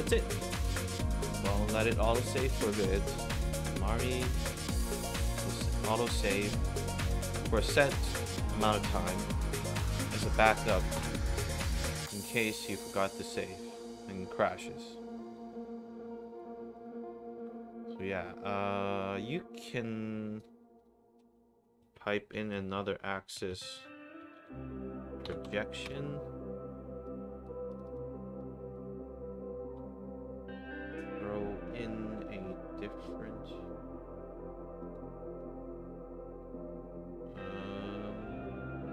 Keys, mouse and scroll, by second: 1.8 drag, 3.5-3.8 drag, 4.4 click, 6.4 click, 10.0 click, 10.4 click, 11.3 click, 11.9 middle drag, 12.6 click, 13.2 click, 14.0 click, 15.3 click, 16.1 click, 16.7 click, 17.3 click, 19.5-20.3 drag, 20.7 click, 21.8 Tab, 22.1-24.9 typing, 25.2 Down, 25.8 Return, 27.0-27.4 drag, 27.6 click, 27.8 click, 28.3 click, 34.7 click, 37.1 scroll down 2, 37.1 middle click.